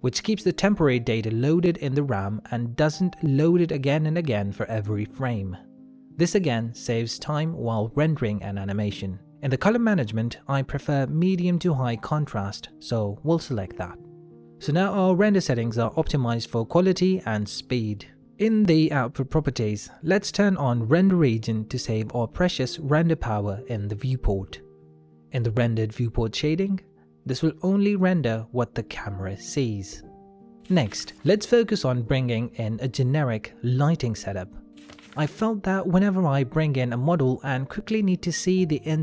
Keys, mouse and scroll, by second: 0.8 click, 2.3 middle click, 7.7 middle click, 9.1 click, 13.7-15.1 scroll up 1, 15.1 middle click, 19.7 click, 23.4 middle click, 27.7 KP_0, 29.0 z, 35.2 ctrl+middle click, 35.7 shift+middle click, 36.9 KP_0, 37.9 z.